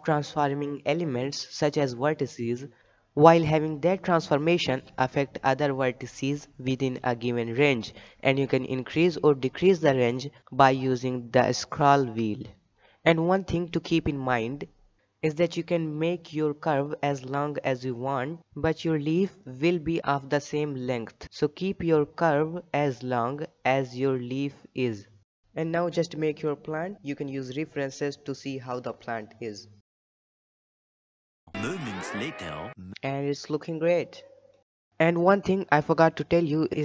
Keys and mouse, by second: 0.0 click, 0.5 g, 3.0 r, 5.8 shift+middle click, 6.0 shift+middle click, 6.2 KP_3, 6.6 shift+middle click, 6.9 g, 8.5 click, 8.7 g, 10.4 click, 10.5 g, 12.2 shift+middle click, 13.1 middle click, 13.6 shift+middle click, 13.9 KP_7, 14.4 shift+middle click, 15.1 shift+middle click, 15.8 g, 16.6 shift+middle click, 17.3 g, 21.3 shift+middle click, 21.5 g, 23.3 Tab, 23.5 KP_3, 23.7 shift+middle drag, 25.6 ctrl+alt+r, 25.8-26.1 middle drag, 26.2 Tab, 26.3 KP_7, 26.6 shift+middle click, 26.9 g, 28.0 r, 29.1 shift+g, 30.2 click, 30.3 g, 30.8 Tab, 30.8 middle drag, 31.1 middle click, 34.8-35.1 middle drag, 35.3 shift+middle drag, 35.8 middle click, 36.7-36.8 middle drag.